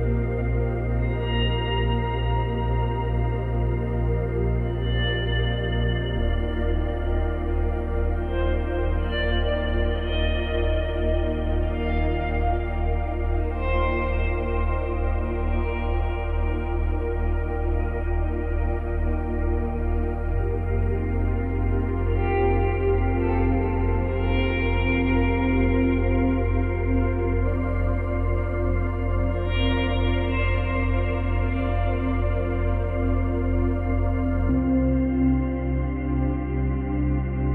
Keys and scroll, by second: 5.0 space, 5.9 space, 6.7 ctrl+s, 25.7 space, 28.6 ctrl+z, 32.3 space, 33.9 space, 35.0 space.